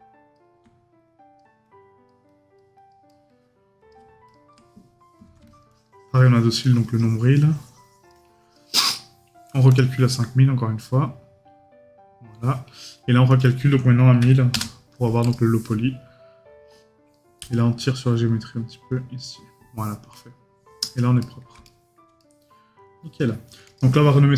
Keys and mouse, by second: 3.1 right click, 21.2 right click.